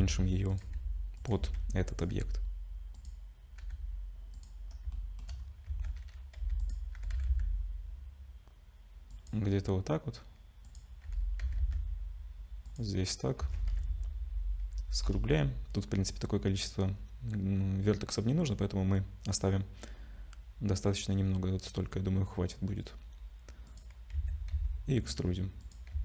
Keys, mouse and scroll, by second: 0.0-2.1 typing, 4.7 scroll up 2, 4.9 shift+middle click, 5.4-5.7 scroll up 2, 5.7 Tab, 6.4 2, 6.6 click, 7.0 g, 10.7 click, 11.0 g, 13.4 a, 14.1 ctrl+shift+z, 14.8 ctrl+shift+b, 24.2 a, 24.5 e, 25.9 Tab.